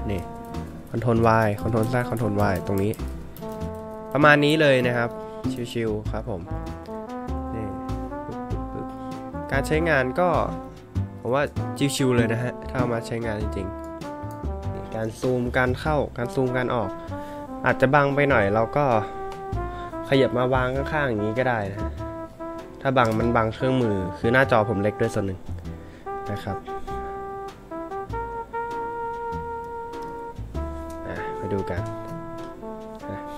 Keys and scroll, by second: 0.2 ctrl+y, 1.2 ctrl+z, 1.8 ctrl+y, 2.3 ctrl+z, 2.8 ctrl+y, 3.3 ctrl+z, 3.7 ctrl+y, 4.8 ctrl+z, 6.4-6.8 scroll down 2, 6.8 scroll up 1, 7.4 scroll up 1, 7.8 scroll down 1, 8.9 scroll up 1, 10.3-11.0 scroll up 1.